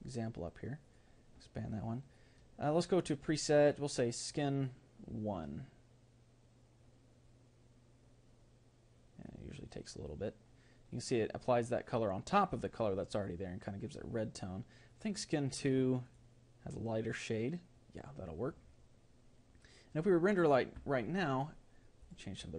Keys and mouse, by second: 16.8-21.3 drag.